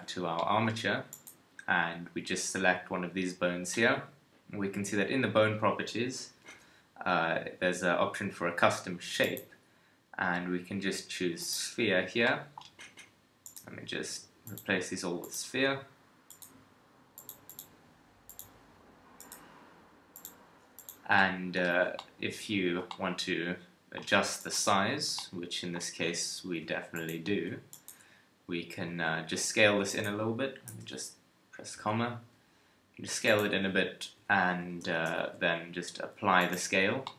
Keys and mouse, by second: 6.4 n, 16.7 click, 21.2 middle click, 21.7 a, 26.9 middle click, 28.9 middle click, 28.9 s, 30.7 ,, 31.7 s, 33.5 alt+a, 34.3 alt+a, 34.9 shift+click, 35.1 ctrl+a.